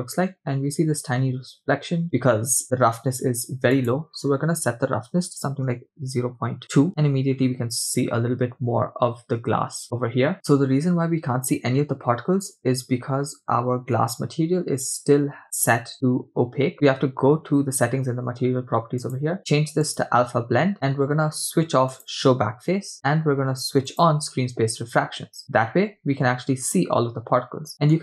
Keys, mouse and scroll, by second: 0.0 middle click, 3.8-6.7 drag, 8.9-9.4 scroll up 3, 9.5-10.3 scroll down 4, 10.3 middle click, 14.1-16.7 scroll down 1, 16.7 scroll down 1, 16.7-17.5 scroll up 2, 17.5 scroll down 2, 19.0-20.5 drag, 22.9 click, 24.2 click, 25.8-26.3 scroll up 3, 27.4 scroll down 2, 27.7 shift+middle click.